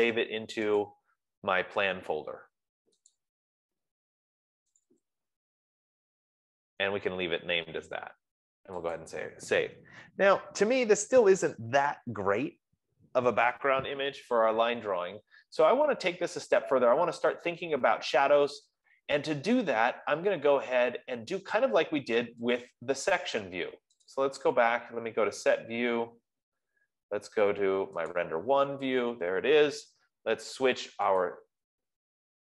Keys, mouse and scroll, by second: 1.5 click, 3.7 click, 5.4 click, 5.5 click, 9.4 click, 11.3-14.4 drag, 22.5 F15, 23.0 click, 24.5 click, 28.8 click, 31.7 click.